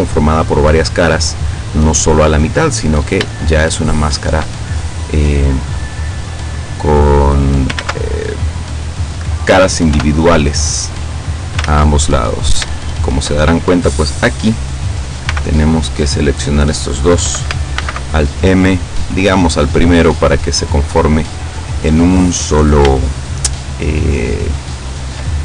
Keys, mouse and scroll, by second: 3.8 shift+middle click, 4.4 shift+scroll up 1, 5.3 right click, 6.4-7.8 drag, 7.8 ctrl+z, 10.0 o, 10.8-11.8 drag, 11.7 ctrl+z, 12.2-12.8 ctrl+scroll up 4, 12.8 shift+click, 15.4 b, 15.6 click, 17.8 alt+m, 19.2 click, 20.1-22.4 drag, 23.0-25.4 shift+middle drag.